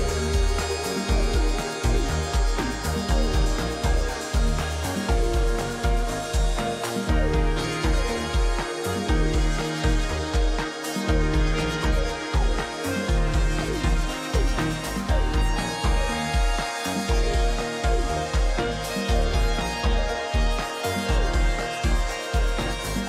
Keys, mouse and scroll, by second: 2.8 click, 4.6 shift+click, 7.2 shift+click, 12.6 right click, 15.2 shift+click, 20.4 ctrl+a.